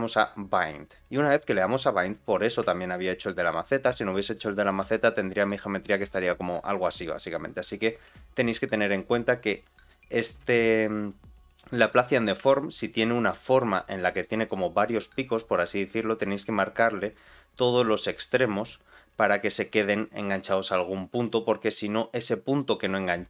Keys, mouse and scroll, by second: 0.5 click, 2.3 scroll down 2, 2.7 shift+middle click, 3.4 click, 3.8 middle click, 4.8 g, 8.4 middle click, 8.9-9.4 scroll up 1, 9.4-9.8 scroll down 2, 9.8 middle click, 10.5 click, 12.4 shift+middle click, 13.8 middle click, 22.5 click.